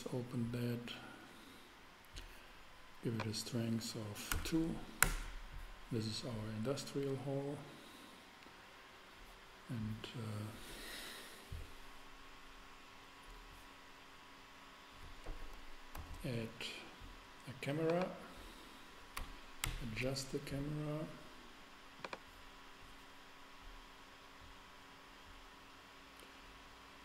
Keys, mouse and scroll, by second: 4.3 2, 5.0 Return, 15.9 shift+a, 16.1 shift+a, 19.6 ctrl+alt+0, 19.8 ctrl+alt+KP_0, 24.0 middle click.